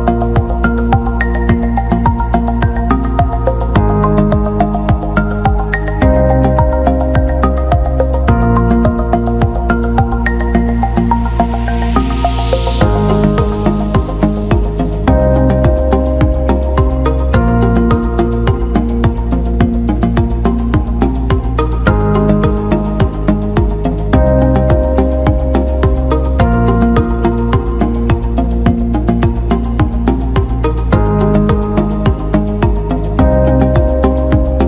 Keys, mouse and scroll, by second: 0.4 alt+middle click, 2.0 click, 2.2 alt+middle click, 3.3 shift+click, 6.8 click, 7.4-9.1 drag, 10.1 ctrl+alt+middle click, 10.7-11.7 alt+middle drag, 12.6 click, 16.4 x, 19.4 click, 20.5 click, 21.3 e, 22.2 s, 27.9-30.9 drag, 31.7-33.1 drag, 33.7-34.6 drag.